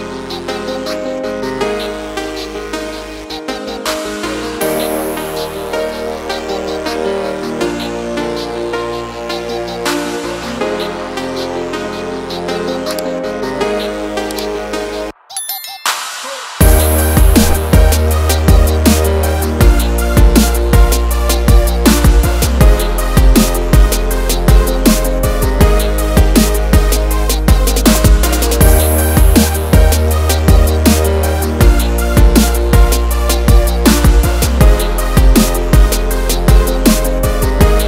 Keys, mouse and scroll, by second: 0.7 click, 2.1 click, 2.9 click, 4.0 click, 4.2 double click, 5.1 click, 6.1 click, 6.3 double click, 7.5 Page_Down, 8.4 click, 9.8 click, 11.8 click, 14.2 click, 14.4 double click, 15.0 click, 16.4 click, 17.0 click, 18.0 click, 19.0 1, 20.5 click, 21.3 1, 23.4 click, 24.4 click, 26.0 click, 27.2 click, 27.9 click, 30.4 ctrl+c, 31.8 click, 34.7 ctrl+v, 35.3 click, 36.9 click.